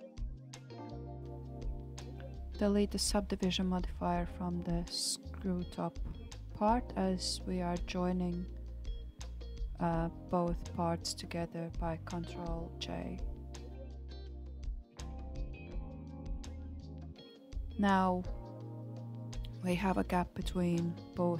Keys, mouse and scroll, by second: 3.0 Tab, 3.8-4.6 scroll up 2, 4.6 shift+click, 6.2-8.0 drag, 8.0 ctrl+z, 8.6 click, 9.9-11.3 drag, 13.2 ctrl+j, 15.9 Tab, 16.5-16.9 scroll up 3, 18.6-21.3 middle drag.